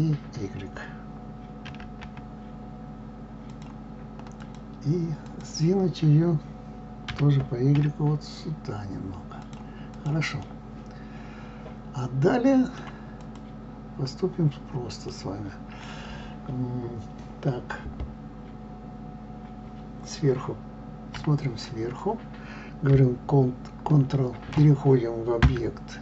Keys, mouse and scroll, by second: 1.7 s, 4.2 click, 5.1 click, 7.1 g, 9.7 click, 10.4-13.0 middle drag, 13.0 click, 15.2-20.8 middle drag, 20.8 KP_7, 25.4 Tab.